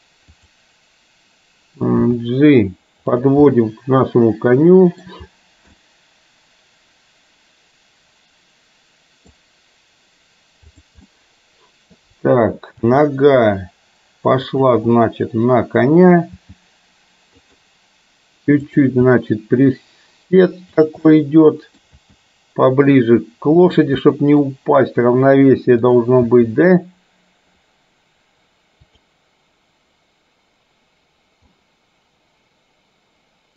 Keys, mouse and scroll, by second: 2.1 g, 3.6-5.0 middle drag, 5.8 scroll up 1, 6.0-9.4 middle drag, 10.8 click, 11.1-12.0 middle drag, 12.9 g, 15.0 scroll up 1, 15.1-16.1 middle drag, 16.4 g, 18.6 click, 19.1 g, 21.1-21.9 middle drag, 23.5 g, 24.1-24.5 middle drag, 26.0 click, 26.3 g, 31.6-33.5 middle drag.